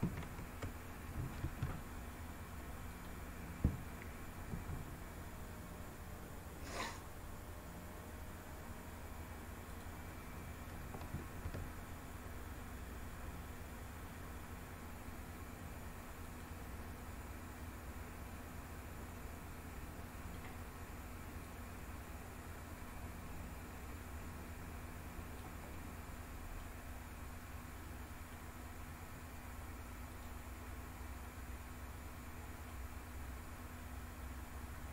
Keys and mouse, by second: 1.0 e, 2.5 click, 4.1 s, 9.3 click, 10.8 e, 15.9 click, 17.2-20.0 middle drag, 21.1-25.0 drag, 25.4 middle click, 27.4 middle click, 29.8 click, 30.9 middle click, 31.7 middle click.